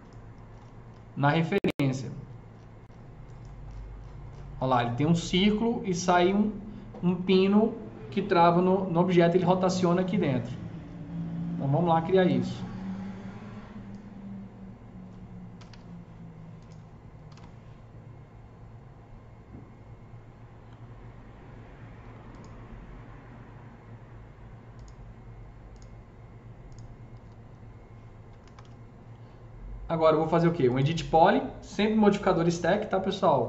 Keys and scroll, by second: 15.3-16.0 typing, 17.1 typing, 18.6-19.4 typing, 28.2 F3, 28.3 F3, 28.5 F4.